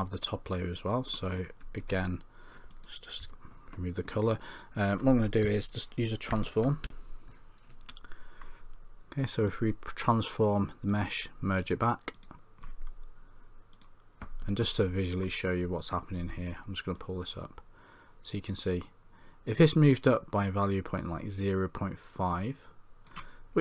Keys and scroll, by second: 3.2 c, 5.5 Tab.